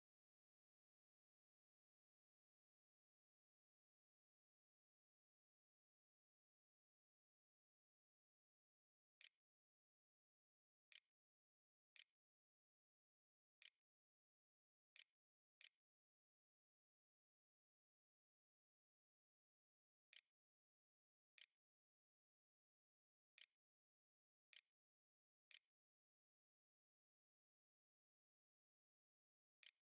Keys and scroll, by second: 8.1-13.3 typing, 13.4 Tab, 14.7 ., 15.4 l, 20.1-22.1 typing, 23.2-25.9 typing, 28.7-29.6 typing.